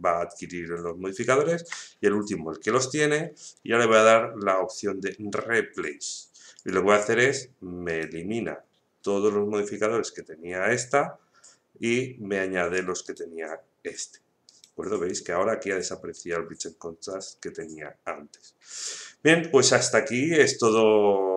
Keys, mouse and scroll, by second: 3.9 click, 6.5 click, 7.8 right click, 13.0 right click.